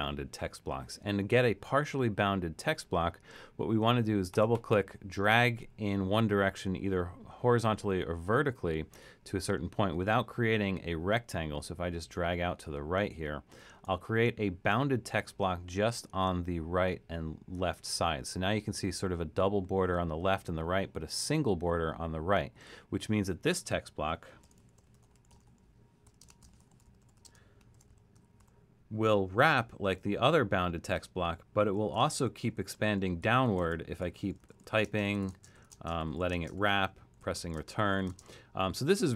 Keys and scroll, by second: 24.2-28.9 typing, 31.0-39.1 typing.